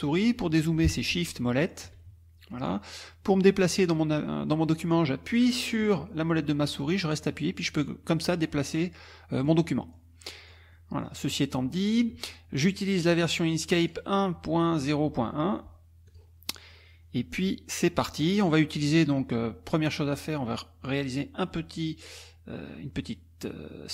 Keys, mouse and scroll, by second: 1.2 shift+click, 1.6 shift+click, 2.0 shift+click, 3.1-5.1 drag, 5.4-9.7 drag, 9.8 click, 10.4 click, 10.9 click, 13.1 click, 13.8 click, 16.1 click, 16.7-18.0 drag.